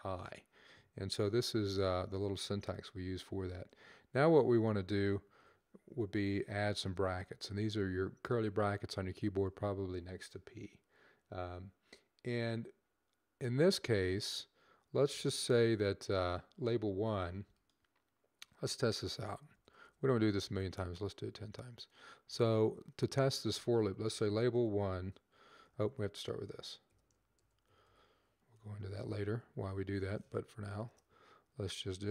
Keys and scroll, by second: 1.5 Left, 5.1 shift+[, 9.3 Up, 11.5 typing, 23.7-25.6 typing, 26.9-28.8 typing, 30.3 typing.